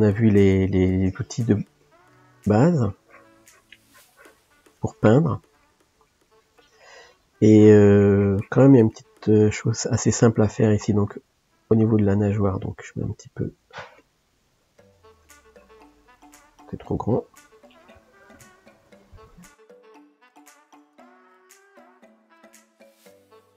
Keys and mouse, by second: 0.3-2.2 drag, 2.2 middle click, 2.8-5.0 drag, 5.0-7.5 middle drag, 7.5-8.9 drag, 8.9-13.5 shift+middle drag, 13.5 f, 15.0-17.2 drag, 17.2 ctrl+z, 19.7 f, 23.0 click.